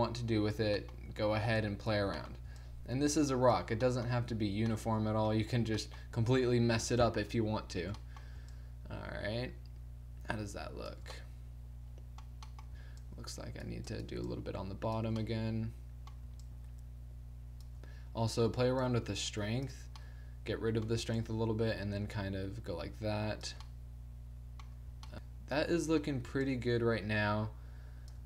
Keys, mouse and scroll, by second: 1.1 middle click, 1.6-3.9 drag, 3.9-6.0 middle drag, 7.1-8.3 drag, 8.3-11.2 middle drag, 13.1-16.2 middle drag, 16.5-18.9 drag, 20.1 click, 20.5 middle click, 21.2-23.7 drag, 23.7-26.5 middle drag, 28.2 click.